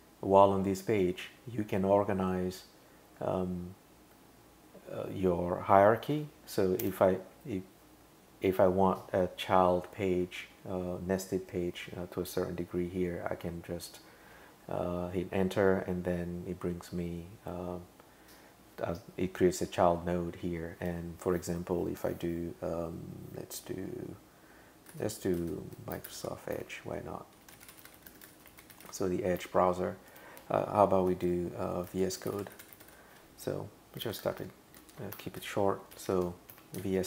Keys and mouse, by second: 6.8 Return, 25.7-29.4 typing, 30.1 Return, 32.0-33.3 typing, 34.0 super+Left, 34.2 super+Right, 34.4 super+Right, 34.8 shift+super+Left, 35.7-36.8 typing.